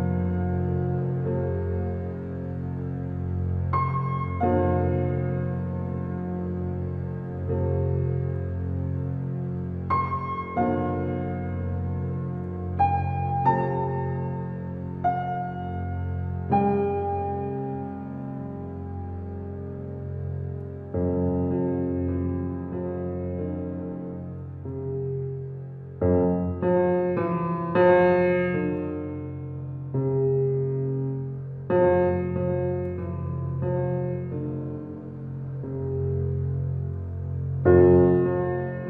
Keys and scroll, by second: 0.5 space, 10.0 ctrl+t, 31.3 space.